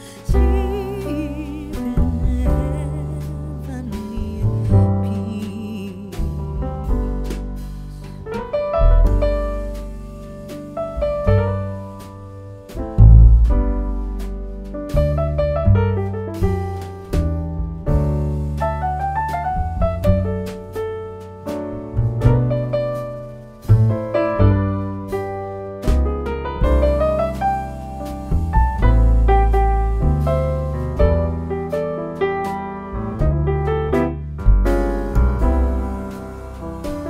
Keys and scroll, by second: 9.9 ctrl+1, 20.9 u, 28.0 shift+s, 28.2 t, 28.3 o, 28.4 e, 28.6 Return, 31.8 Escape, 36.9 Escape.